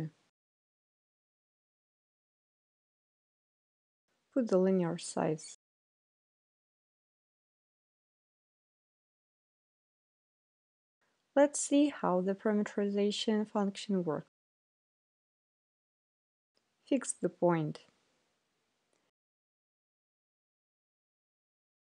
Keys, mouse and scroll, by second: 0.0 click, 0.6 Return, 3.3 click, 5.0 click, 6.4 click, 7.7 click, 8.7 click, 10.0 click, 12.0-13.1 drag, 15.0 click, 16.1 right click, 17.7-18.9 drag, 19.5 click, 20.4 right click, 21.4 click.